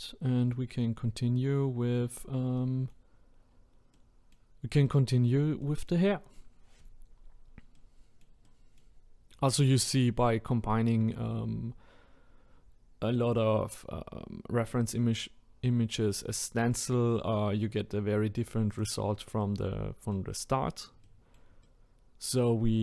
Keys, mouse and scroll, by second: 0.0-0.5 scroll down 2, 0.5 middle click, 1.1-1.5 scroll up 1, 1.7-2.6 scroll up 2, 2.6-3.2 middle drag, 3.2-3.9 scroll down 2, 3.9-8.9 middle drag, 8.9-9.8 scroll up 1, 9.8-12.8 middle drag, 17.3 scroll down 1, 18.7 click, 19.4-22.8 middle drag.